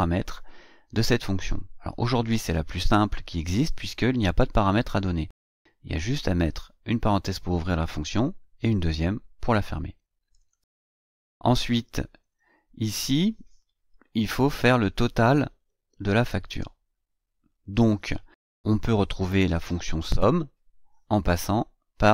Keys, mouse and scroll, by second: 10.4 click, 12.1 scroll down 2, 14.1 ctrl+scroll down 2, 14.7 ctrl+scroll down 2, 15.7-16.0 scroll up 2, 16.3 scroll down 2, 17.5 click.